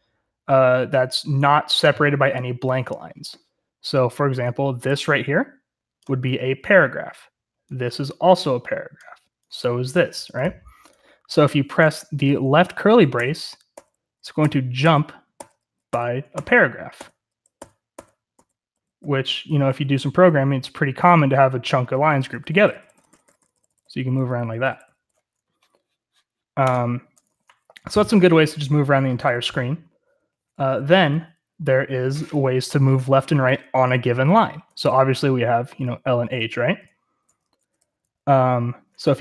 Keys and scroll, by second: 13.1-24.9 typing, 28.1-31.6 typing, 34.7-38.2 typing.